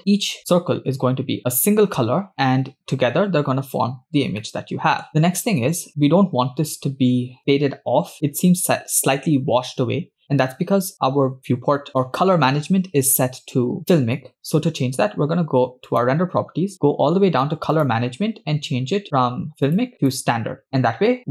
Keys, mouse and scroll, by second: 0.0 shift+middle click, 2.5-3.7 scroll down 7, 4.4-5.1 shift+middle drag, 6.8 scroll down 2, 7.5 scroll up 3, 8.2 scroll down 2, 10.3 scroll down 2, 10.7 scroll up 1, 15.9 click, 16.8 scroll down 4, 17.7 click, 18.2-18.9 scroll down 2, 19.7-21.3 drag.